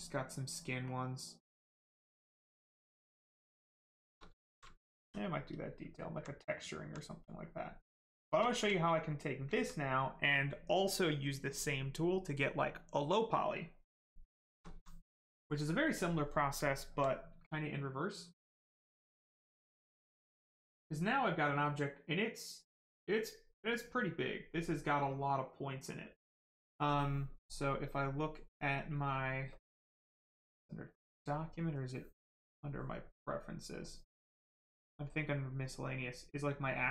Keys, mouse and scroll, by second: 0.8 click, 3.2 right click, 3.7 shift+right click, 4.3 alt+right click, 5.5 right click, 5.5 right click, 6.0 alt+right click, 6.9 right click, 7.0 right click, 8.1 shift+right click, 8.4 alt+right click, 8.7 right click, 8.8 right click, 9.5 alt+right click, 14.0 right click, 14.3 shift+right click, 14.6 alt+right click, 15.2 click, 15.3 click, 16.6 alt+right click, 19.3 click, 27.7 click, 30.1 click, 32.5 click, 34.6 click.